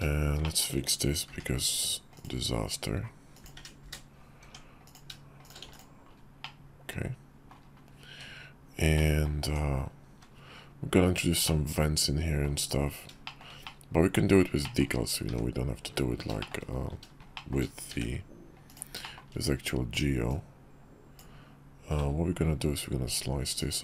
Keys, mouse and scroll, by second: 0.1 shift+middle click, 1.0 k, 4.1 Tab, 4.6 click, 5.1 shift+click, 5.4 x, 6.1-7.3 middle drag, 7.8 `, 8.7 middle click, 9.1 Tab, 9.8 `, 11.2-12.2 middle drag, 13.0 shift+middle click, 13.4 middle click, 14.3 shift+middle click, 16.1 shift+middle click, 16.8 `, 17.1 shift+middle click, 17.6 d, 18.8 shift+middle click, 20.0 click.